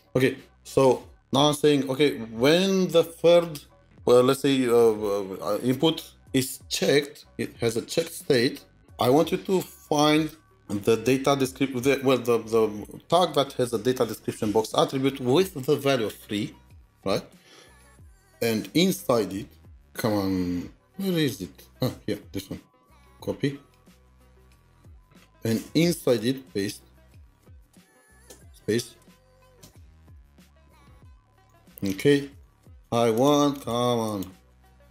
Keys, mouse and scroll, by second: 19.7-20.4 scroll up 3, 20.7-22.9 scroll down 2, 24.4 scroll down 1, 24.4 typing, 24.8 scroll up 1, 28.1 typing, 30.6 typing, 31.9 typing, 32.3 double click, 32.3 double click, 32.7 double click, 33.1 double click, 33.5 double click, 34.1 double click, 34.7 double click.